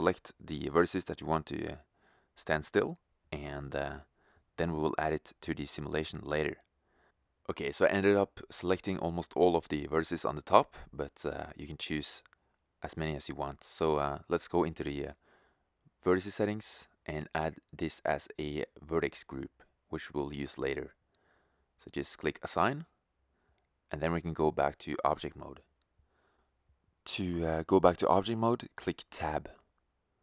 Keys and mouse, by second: 2.8-4.0 right drag, 5.2-10.4 right drag, 10.4-13.9 middle drag, 13.9-20.1 drag, 20.4-22.2 drag, 22.4-24.3 drag, 26.8 Tab, 28.4-30.2 middle drag.